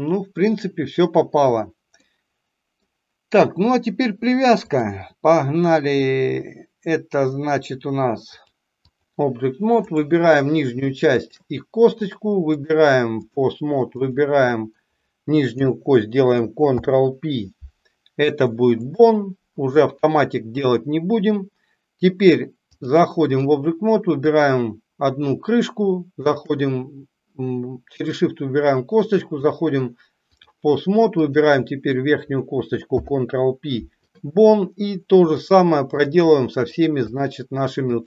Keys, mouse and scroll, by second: 1.9 middle click, 4.6-7.1 drag, 8.4-9.1 drag, 11.0 shift+click, 12.6 click, 13.9 click, 16.6 ctrl+p, 22.7-23.5 drag, 26.2 shift+click, 29.4-30.5 drag, 31.2 click, 32.9 ctrl+p, 35.2-36.1 drag, 36.2 middle click, 37.0 click, 37.9 shift+click.